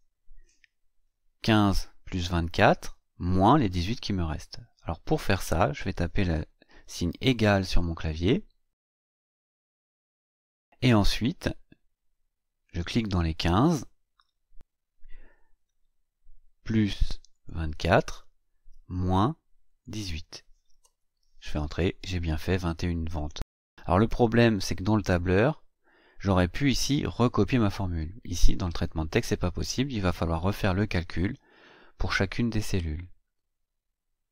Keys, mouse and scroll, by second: 12.6 click, 16.5 KP_Add, 17.3 click, 18.7 KP_Subtract, 19.6 click, 20.7 Return.